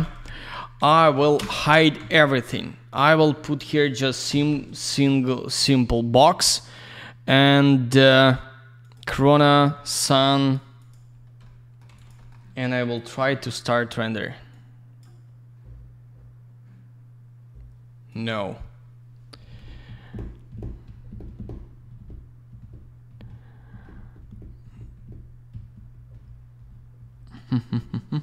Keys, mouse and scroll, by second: 0.7 ctrl+a, 1.3 ctrl+space, 1.9 z, 3.1 click, 3.5 click, 4.0 click, 4.5 alt+middle click, 6.4 click, 6.5 click, 7.8 click, 7.9 click, 8.7 click, 8.9 click, 9.4 click, 9.5 click, 9.7 middle click, 10.1 click, 10.7 click, 10.8 click, 11.1 scroll down 1, 11.7 alt+middle click, 11.8 alt+z, 11.9 click, 12.0 click, 12.1 middle click, 12.2 double middle click, 12.9 click, 12.9 click, 14.4 click, 18.0 click.